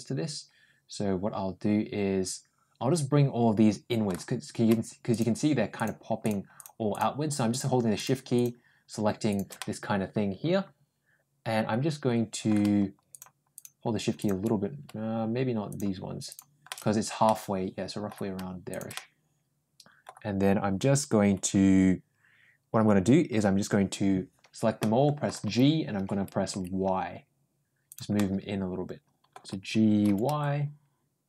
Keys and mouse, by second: 5.6 shift+click, 6.1 shift+click, 7.3 shift+click, 9.1 shift+click, 9.4-12.3 middle drag, 13.0 shift+click, 13.4 shift+click, 14.1 shift+click, 16.2 shift+click, 16.5 shift+middle click, 17.1 middle click, 18.6 shift+click, 18.8-19.9 middle drag, 24.6 middle click, 25.3 g, 28.0-29.1 middle drag, 29.9 g.